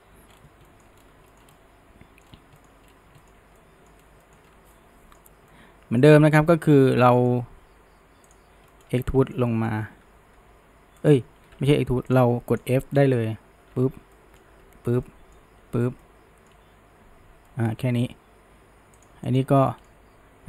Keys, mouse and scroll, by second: 0.3-0.7 scroll, 0.7 middle drag, 1.0-1.3 scroll, 1.3-2.3 shift+middle drag, 2.3 scroll, 2.6 shift+middle drag, 2.9-3.2 scroll, 3.2-4.0 shift+middle drag, 4.0-4.7 scroll, 4.2 shift+middle drag, 4.7-6.8 middle drag, 6.8 scroll, 7.0-8.3 shift+middle drag, 8.3 shift+click, 8.7 shift+middle drag, 9.0 scroll up 1, 9.2-10.4 shift+middle drag, 10.4 e, 11.4 ctrl+z, 12.6 shift+click, 13.0-13.7 middle drag, 13.7 f, 14.2-14.6 shift+middle drag, 14.6 f, 15.1-15.6 middle drag, 15.6 f, 16.0-19.0 shift+middle drag, 19.0 drag, 19.3 shift+click, 19.7-20.4 shift+middle drag.